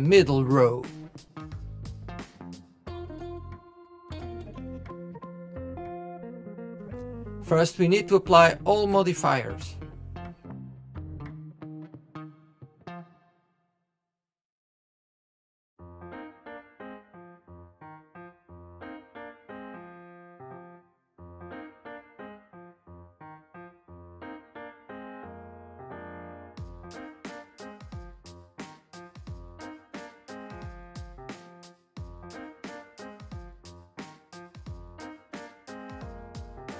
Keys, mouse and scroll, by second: 0.3-1.3 middle drag, 1.3 KP_7, 2.5 click, 5.1-6.4 drag, 7.7 ctrl+z, 8.8 KP_1, 9.9 shift+click, 10.7 shift+click, 11.2 click, 12.8 click, 14.5 click, 16.1-17.7 drag, 17.7 KP_7, 18.6 click, 20.1 click, 22.3-24.5 middle drag, 24.5 KP_1, 24.7 KP_7, 26.0 click, 26.6 click, 27.5 click, 28.9 click, 30.7 KP_1, 32.1 scroll down 1, 32.3-35.2 shift+middle drag, 35.2-35.9 drag, 36.6-36.7 middle drag.